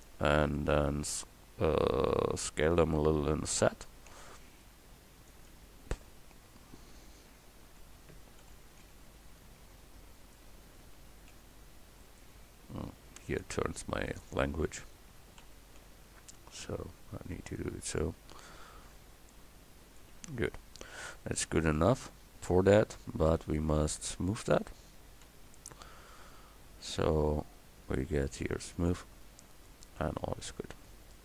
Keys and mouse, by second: 0.0-3.7 middle drag, 3.7 s, 8.4 s, 11.0 s, 15.4 s, 18.6-20.5 drag, 20.5 a, 21.3 Tab, 23.3 Tab, 25.3 l, 27.2 Tab.